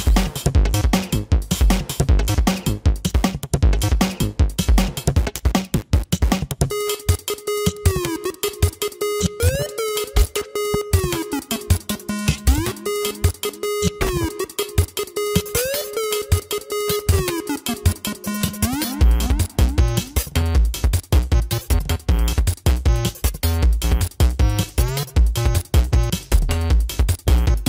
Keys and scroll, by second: 0.2 ctrl+=, 0.8 space, 1.2 ctrl+=, 19.1 space.